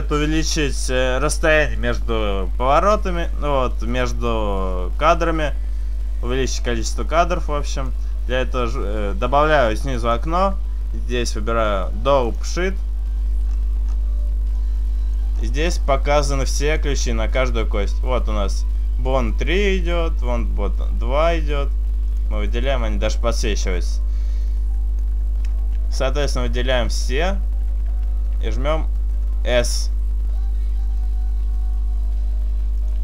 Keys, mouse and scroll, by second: 6.7 click, 10.1 click, 22.5 click, 28.3 a, 28.3 s, 29.7 s.